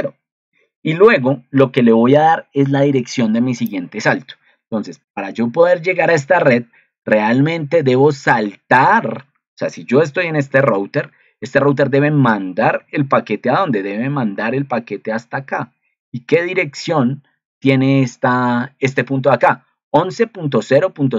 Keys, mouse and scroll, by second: 10.5 ctrl+2.